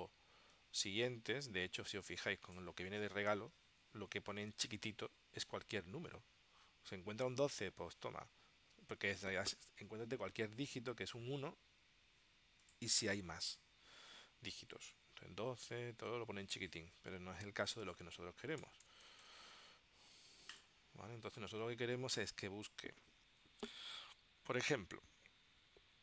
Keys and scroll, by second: 18.7 BackSpace.